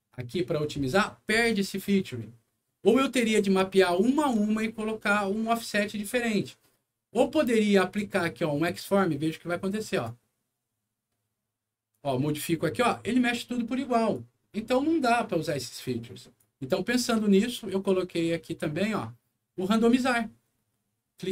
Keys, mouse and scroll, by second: 3.7 alt+middle click, 4.6 alt+scroll up 1, 9.8 click, 11.8-14.1 drag, 15.2 right click, 15.8 click.